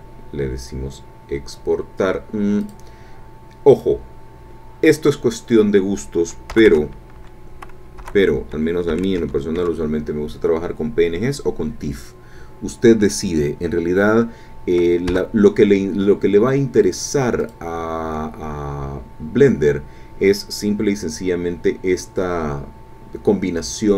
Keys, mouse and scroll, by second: 2.6 click, 3.7 click, 6.6 BackSpace, 8.0 BackSpace, 8.9 p, 9.2 n, 9.5 g, 15.1 Return, 17.4 click.